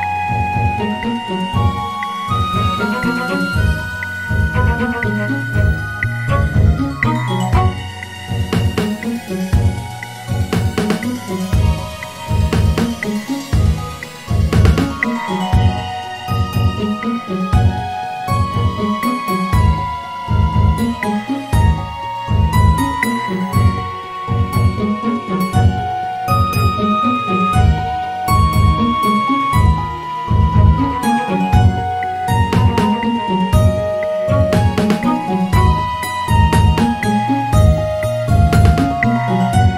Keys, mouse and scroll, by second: 2.3 e, 4.9-6.1 drag, 7.1-8.7 scroll up 2, 8.7 click, 11.0 e, 13.6 e, 15.6 m, 19.0-19.6 scroll up 1, 19.6 Tab, 20.3-20.9 scroll down 1, 20.9-21.7 scroll down 3, 21.7 Tab, 22.1-22.7 scroll up 1, 22.7-23.4 scroll up 1, 23.4 KP_Add, 23.7 KP_Add, 24.2 KP_Add, 24.7 KP_Add, 26.4 s, 29.5-31.0 scroll up 1, 31.0-31.9 scroll up 1, 31.9 click, 34.0 click, 35.1 g, 37.8 click, 38.4 g.